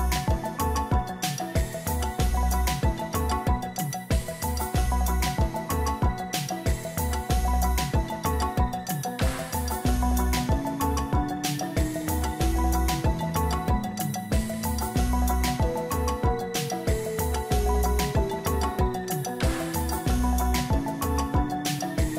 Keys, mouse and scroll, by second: 0.0 double click, 1.3 double click, 5.2 right click, 7.1 Return, 8.6 ctrl+j, 19.3 double click, 20.4 double click, 21.8 double click, 22.0 double click.